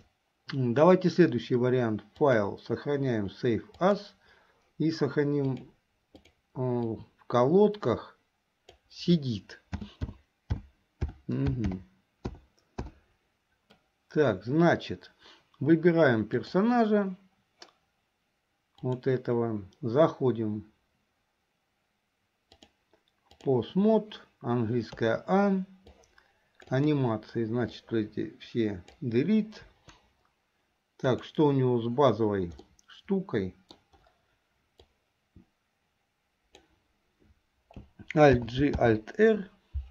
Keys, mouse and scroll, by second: 2.2-4.4 drag, 16.4 click, 18.9 click, 22.6-23.6 drag, 25.1 a, 26.0 click, 26.9 click, 27.8-29.0 drag, 29.7 Delete, 31.2 click, 32.7-34.0 middle drag, 34.9-36.8 drag, 38.4 alt+g, 38.9 alt+r.